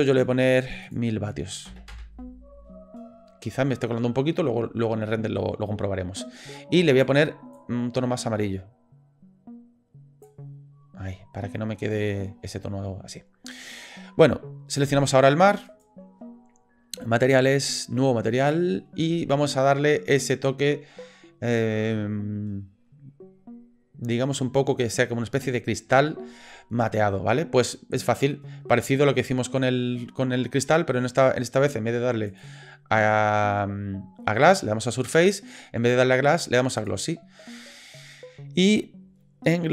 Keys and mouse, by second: 7.0 click, 15.7 click, 17.2 click, 18.4 click, 32.3-36.8 drag.